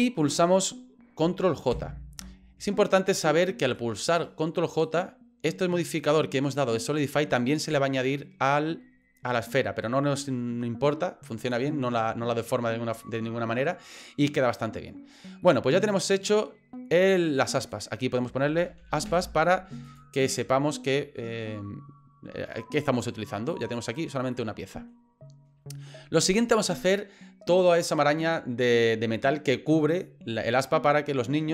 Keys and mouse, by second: 3.1 right click, 3.8 middle click, 4.9 right click, 11.5-13.7 middle drag, 14.4 middle click, 15.4 middle click, 17.6-20.0 drag, 21.2 middle click, 23.5 click, 23.8 click, 24.3 middle click.